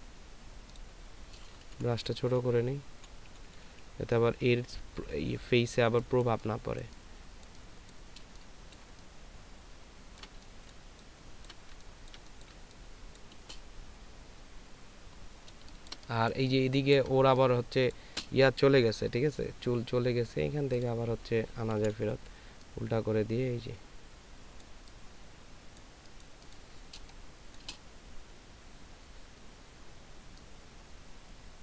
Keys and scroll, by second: 2.2 [, 3.3 [, 3.8 [, 8.5 space, 10.7 ctrl+space, 11.7 ctrl+space, 12.5 ctrl+space, 15.5 ctrl+space, 16.3 ctrl+space, 22.1 [, 22.2 [, 22.3 [, 27.3 space.